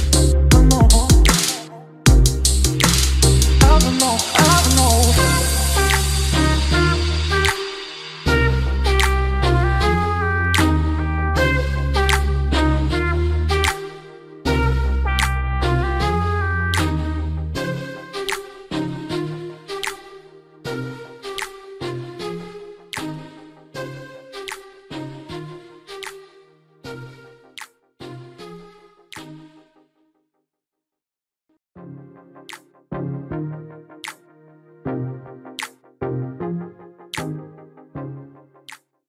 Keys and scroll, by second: 0.2 ctrl+g.